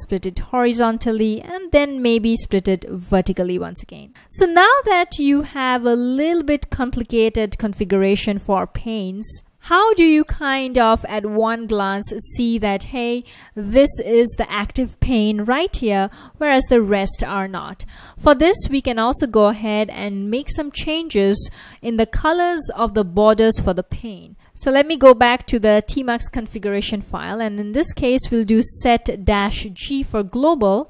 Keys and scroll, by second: 0.2 h, 2.8 ctrl+a, 3.3 v, 15.0 F1, 15.3 F1, 15.9 F1, 20.4 super+Tab, 23.3 Return, 23.5 Return, 27.0-28.7 typing, 30.0-30.8 typing.